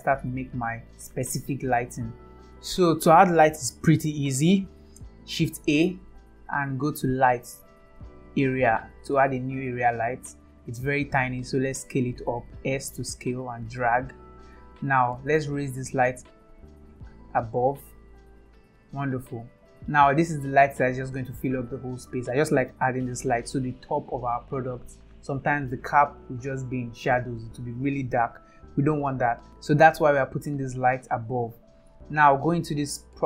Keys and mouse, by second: 4.1-4.6 middle drag, 5.8 shift+a, 11.7 s, 16.4-19.8 drag, 20.3-21.3 middle drag.